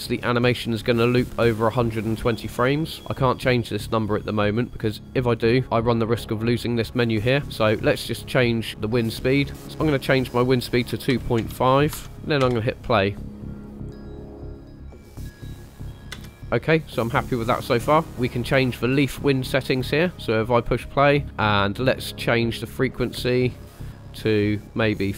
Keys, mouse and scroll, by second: 9.5-12.1 drag, 12.4 space, 16.0 space, 16.1 space, 21.2 space, 23.1 space, 24.3-25.1 drag.